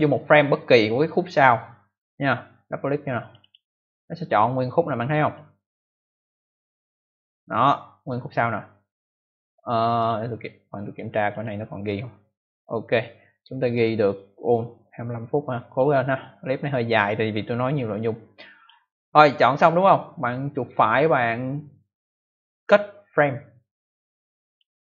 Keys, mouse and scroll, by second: 3.1 click, 3.3 click, 3.4 double click, 5.3 click, 11.2 click, 11.3 click, 15.6 click, 17.3 click, 20.4 right click, 24.4 click.